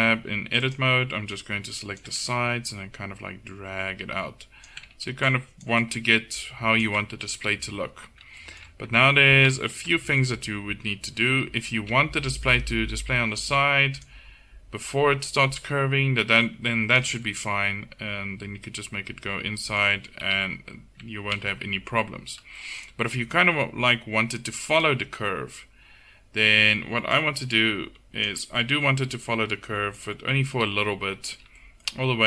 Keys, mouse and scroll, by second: 1.3 a, 5.0 a, 7.4 KP_7, 8.1 middle click, 9.0 Tab, 9.5 Tab, 11.7 a, 12.0 a, 13.0-17.3 drag, 19.2 middle click, 20.3 KP_7, 20.5 Tab, 21.1 Tab, 21.4 z, 28.6-30.6 middle drag, 30.6 KP_7.